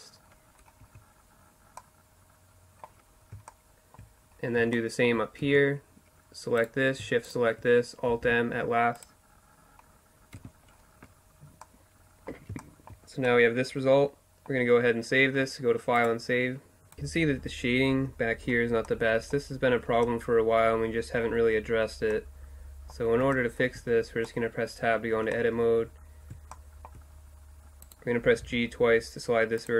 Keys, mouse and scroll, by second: 0.2-0.6 middle drag, 4.5 Tab, 7.2 alt+m, 9.4 Tab, 15.0-16.9 drag, 17.0-22.6 middle drag, 24.9 Tab, 28.3 g.